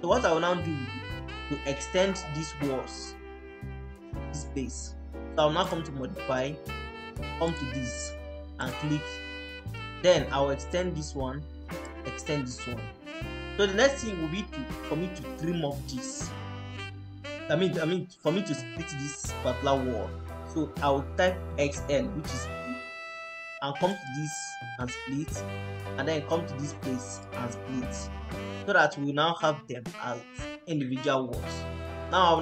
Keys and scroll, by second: 21.1-22.1 typing, 28.2 Escape.